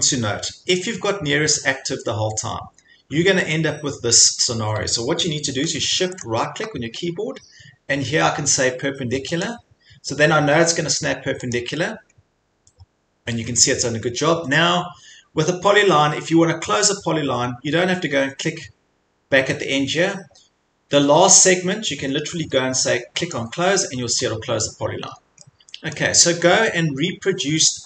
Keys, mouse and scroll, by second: 6.2 shift+middle click, 12.2-12.8 scroll, 12.3 click, 23.3 click, 24.2 scroll, 25.0 scroll, 26.0-26.4 scroll.